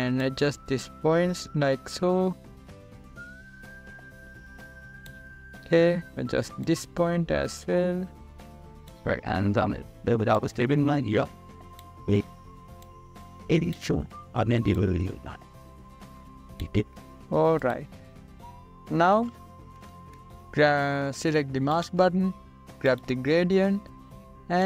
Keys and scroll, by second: 21.7 ctrl+=.